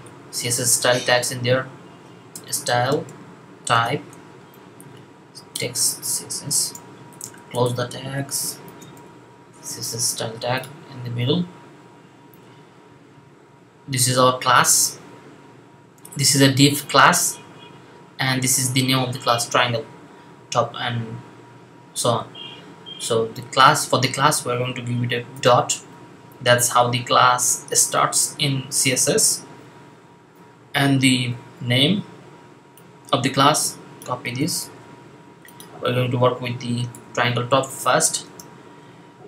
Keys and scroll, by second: 0.0-3.7 typing, 6.5 shift+., 8.4-8.8 typing, 25.2 typing, 27.6 typing, 34.5 super+c, 36.8 super+v, 38.1 space.